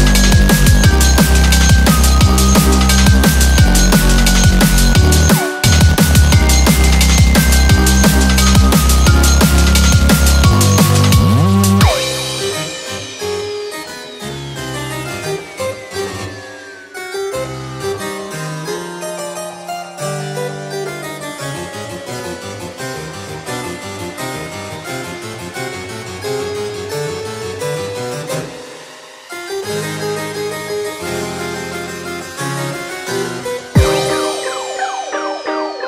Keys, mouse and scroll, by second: 0.7 2, 0.8 4, 8.4 scroll, 8.9 click, 8.9-9.2 scroll down 8, 9.2 middle click, 9.8 scroll up 3, 9.9 middle click, 10.1-10.7 scroll down 3, 10.5 middle click, 10.8 click, 11.0-11.4 scroll up 2, 12.1 ctrl+a, 12.7 click, 13.4 ctrl+a, 14.5 shift+click, 18.2 ctrl+j, 19.1 scroll up 4, 19.3 middle click, 19.6 scroll down 5, 19.9 middle click, 20.2 click, 20.4 middle click, 20.7-21.4 scroll up 10, 21.7-22.1 scroll down 6, 22.1 middle click, 22.2 scroll up 1, 22.3 scroll down 1, 22.6 middle click, 22.9 click.